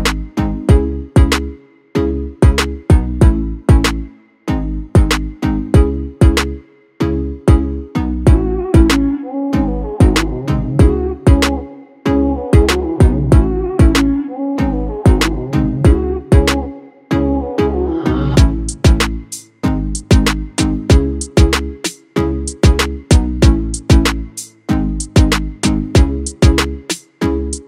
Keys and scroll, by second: 16.6 1, 16.7 5.